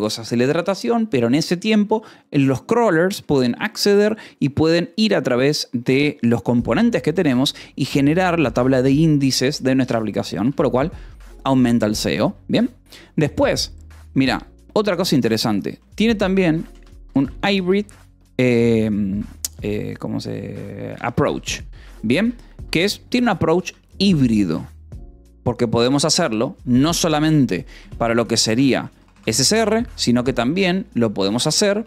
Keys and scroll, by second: 10.3 :, 10.4 space, 16.1-17.7 typing, 20.7-22.5 typing, 22.1 Escape, 23.5 Escape, 26.5 a, 27.7-31.5 typing.